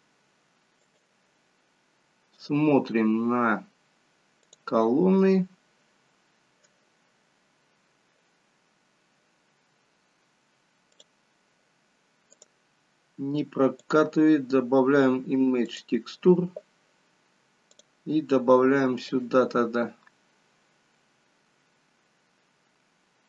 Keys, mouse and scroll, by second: 4.8 click, 11.0 click, 12.9 click, 17.8 click.